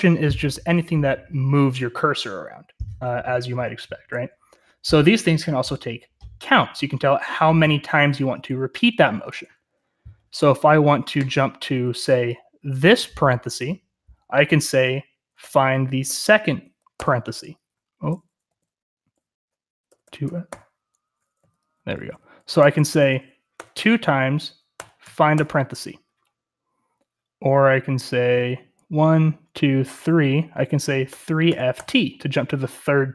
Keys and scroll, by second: 8.3-9.8 typing, 15.3-16.9 typing, 18.4 typing, 19.8-23.5 typing, 24.7-25.3 typing, 30.8-32.2 typing.